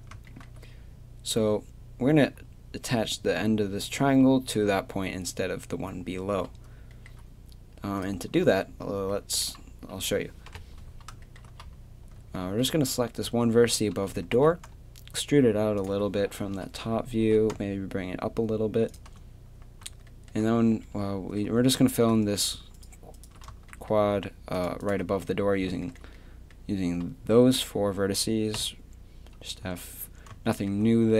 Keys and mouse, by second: 4.0-8.0 middle drag, 8.4-10.0 middle drag, 10.5 KP_7, 14.3 e, 16.5 KP_3, 17.2 g, 21.0 click, 21.7-23.7 drag, 23.7 right click, 23.9-26.4 middle drag, 26.5 middle click, 28.6 f, 29.6 a.